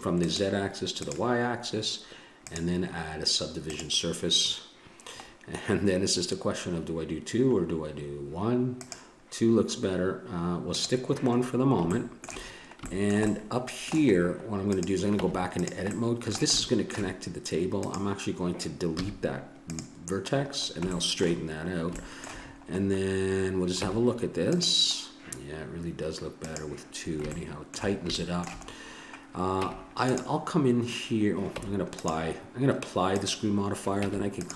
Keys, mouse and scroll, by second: 0.2-2.2 drag, 2.5-4.8 drag, 5.2-8.8 middle drag, 8.8 click, 11.9 middle click, 14.7-16.6 drag, 15.2 Tab, 17.8-19.6 drag, 19.0 x, 22.2-23.8 middle drag, 23.8 Tab, 26.4 click, 27.3-28.4 middle drag, 29.5 Tab, 31.6 Tab, 33.2-34.5 drag, 34.0 Tab.